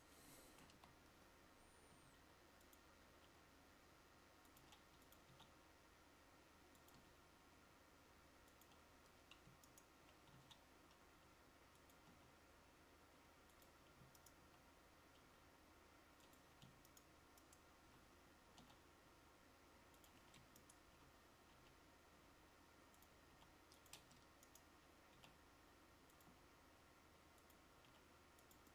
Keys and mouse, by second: 0.8 KP_1, 2.0 g, 3.2 r, 12.2 g, 15.3 g, 23.4 r, 24.1 Tab, 25.3 r.